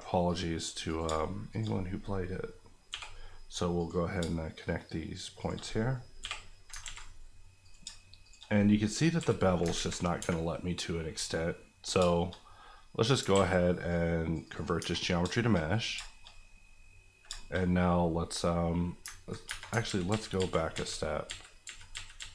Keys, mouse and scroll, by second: 0.2 click, 0.5 right click, 0.9 click, 1.0 shift+click, 1.7 click, 2.9 j, 3.8 click, 4.2 shift+click, 5.6 click, 6.2 j, 6.8 ctrl+j, 7.0 z, 7.6 click, 7.8 shift+click, 8.3 click, 9.2 j, 9.7 ctrl+j, 9.8 ctrl+z, 10.2 Tab, 11.9 shift+scroll down 1, 12.1 shift+middle click, 12.3 middle click, 13.2 ctrl+middle click, 13.3 ctrl+a, 13.8 click, 14.8 Tab, 14.9 scroll up 1, 15.3 shift+middle click, 15.6 scroll up 1, 16.0 shift+middle click, 16.2-17.2 scroll up 1, 17.2-17.6 shift+scroll up 3, 17.3 shift+middle click, 19.1-19.4 ctrl+scroll up 2, 19.4 Tab, 19.8 ctrl+z.